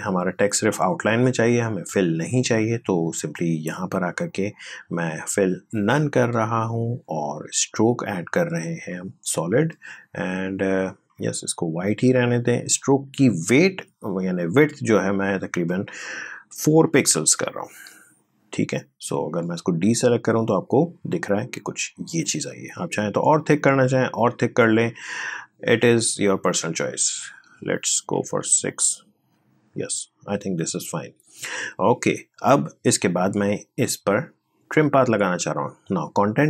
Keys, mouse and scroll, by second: 3.3-16.9 drag, 16.9 4, 19.3 click, 20.5 scroll up 1, 23.1-23.5 scroll down 1, 24.5 scroll up 1, 25.1 click, 28.0 6, 28.6 click, 35.7 click.